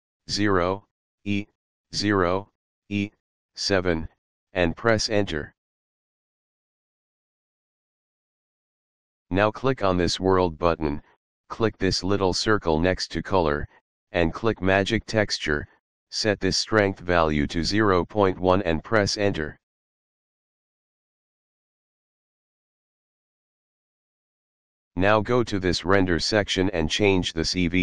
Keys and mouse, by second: 0.1 KP_0, 1.6 KP_0, 3.9 e, 4.4 7, 4.8 Return, 8.7 click, 11.4 click, 16.2 click, 18.6 click, 19.5 click, 22.1 KP_Decimal, 22.4 KP_1, 22.8 Return, 26.2 click.